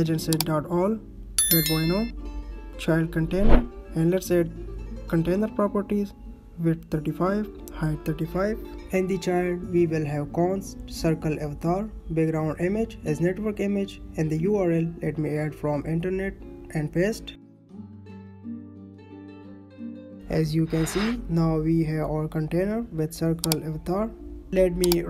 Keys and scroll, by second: 1.7 Right, 2.1 Right, 2.4 ctrl+s, 5.3 Down, 6.8 Right, 7.0 space, 8.1 ctrl+s, 9.6 space, 11.9 Down, 17.1 ctrl+c, 18.4 ctrl+v, 18.7 ctrl+s, 22.4 space, 23.2 space, 23.4 ctrl+s.